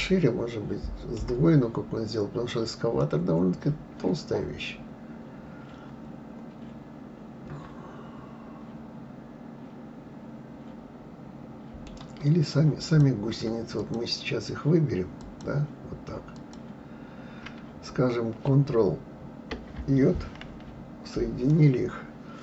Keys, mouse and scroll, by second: 3.0-6.0 middle drag, 12.9 click, 13.8 shift+click, 15.2 shift+click, 16.4 shift+click, 20.5 ctrl+j, 21.5-22.4 middle drag.